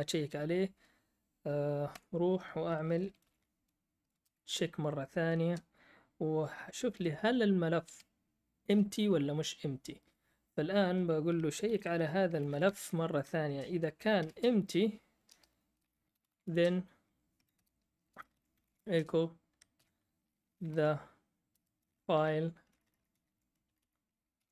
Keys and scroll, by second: 1.9 Up, 1.9 o, 3.0-4.2 typing, 5.4 space, 6.7-7.8 typing, 11.6-14.3 typing, 15.3 Return, 15.8-19.1 typing, 17.5 Return, 20.3-24.5 typing.